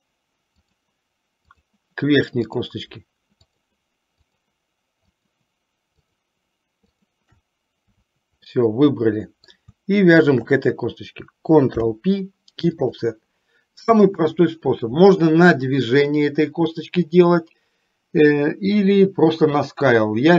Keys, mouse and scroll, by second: 0.6 shift+click, 1.7 shift+click, 2.6 shift+click, 3.6 shift+click, 4.5 shift+click, 5.4 shift+click, 6.1 shift+click, 7.1 shift+click, 8.6-9.7 middle drag, 10.4 shift+click, 11.9 ctrl+p.